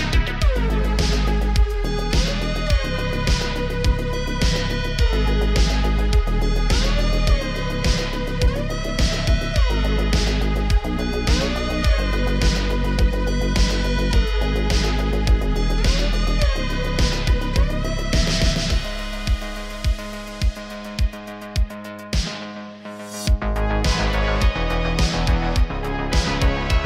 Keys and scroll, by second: 0.6 ctrl+l, 8.6 shift+d, 9.0 r, 9.2 r, 11.6 g, 14.1-15.2 typing, 16.5 s, 16.7 x, 16.9 x, 20.0 shift+d, 24.4 g, 24.6 z.